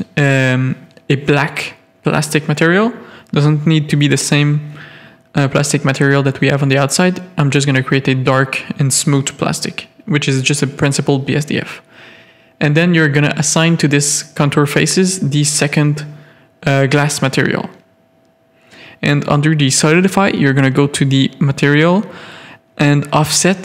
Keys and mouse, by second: 2.3-6.2 drag, 3.8 BackSpace, 7.6 click, 8.6-13.2 drag, 13.6 middle click, 13.7 1, 14.1 z, 14.5 middle click, 15.3 z, 15.6 z, 16.2 middle click.